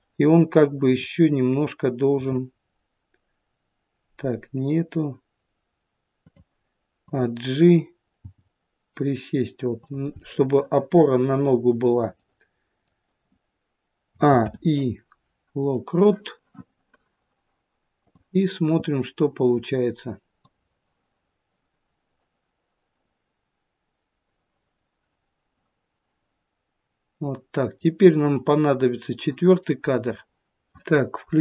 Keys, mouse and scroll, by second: 0.8 click, 2.1 r, 7.1 click, 8.2 g, 11.2 middle click, 12.2 middle click, 14.1 a, 14.4 i, 18.1 click, 20.4 click.